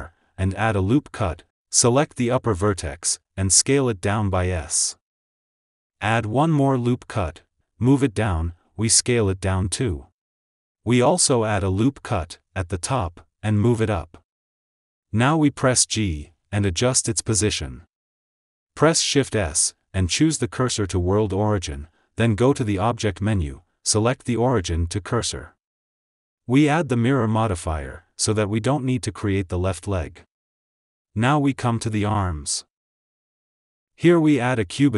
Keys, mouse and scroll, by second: 0.5 ctrl+r, 2.6 click, 4.7 s, 7.2 ctrl+r, 8.8 click, 8.8 click, 9.7 s, 11.8 Tab, 11.9 Tab, 12.8 ctrl+r, 14.9 Tab, 15.2 click, 16.0 g, 16.8 click, 17.8 click, 20.1 shift+s, 22.8-26.3 drag, 29.4-30.6 drag, 31.3 click, 32.3-32.7 shift+middle drag, 34.1 shift+right click, 34.6 shift+a.